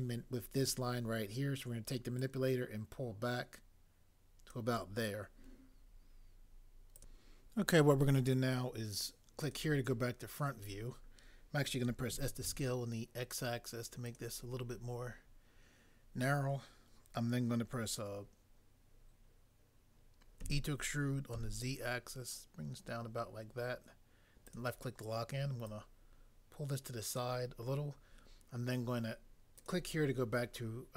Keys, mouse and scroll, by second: 12.1 typing, 20.4 e, 21.4 z.